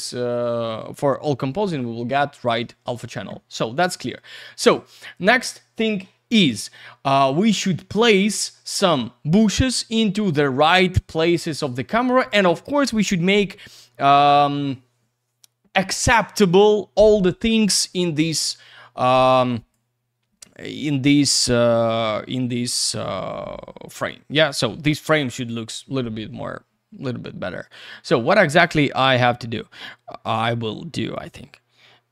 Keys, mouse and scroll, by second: 7.5 click, 20.6 click, 25.3 click, 27.6 click, 31.0 click.